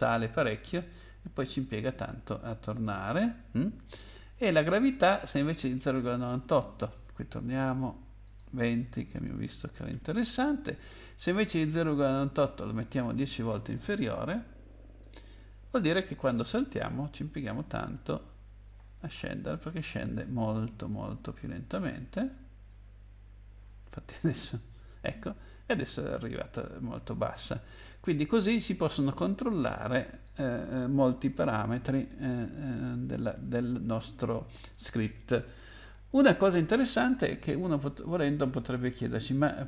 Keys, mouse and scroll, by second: 2.7 click, 5.2 click, 8.2 click, 8.9-10.4 typing, 12.5 click, 13.5 0, 15.0 click, 17.7 space, 27.8 click, 30.1 click, 31.0 BackSpace, 34.7 click, 35.8 ctrl+s, 37.5-38.5 scroll down 8.